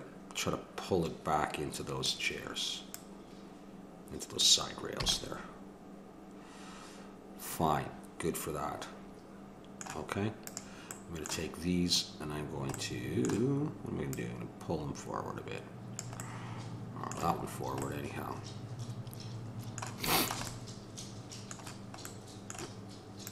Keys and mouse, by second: 2.9-4.7 drag, 5.0 a, 5.3-7.9 middle drag, 10.4-12.3 drag, 12.3-14.1 middle drag, 14.1-15.9 drag, 16.2-19.6 middle drag, 20.0-23.3 middle drag, 23.2-23.3 drag.